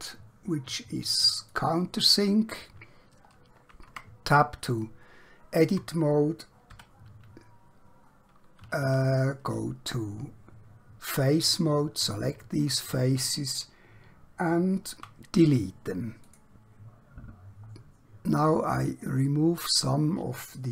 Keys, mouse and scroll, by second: 3.3 scroll up 1, 3.9 Tab, 4.9 shift+middle click, 6.7 2, 8.9 3, 11.1 alt+click, 15.0 x, 16.2 click, 17.7 scroll up 1, 18.2 scroll down 1, 18.6-20.7 scroll up 1.